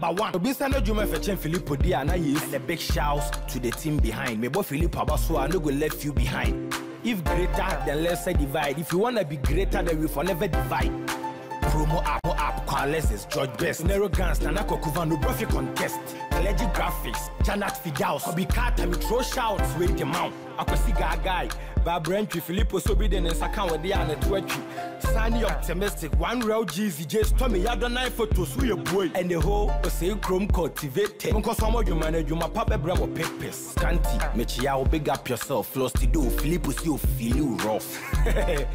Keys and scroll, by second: 5.3 ctrl+i.